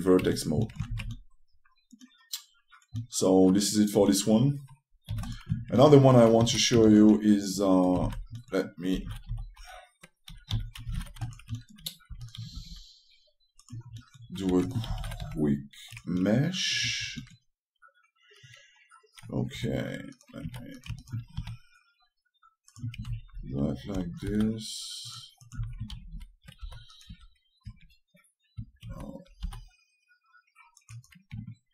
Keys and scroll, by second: 0.3 shift+5, 23.9 space, 26.3 space, 31.1 typing.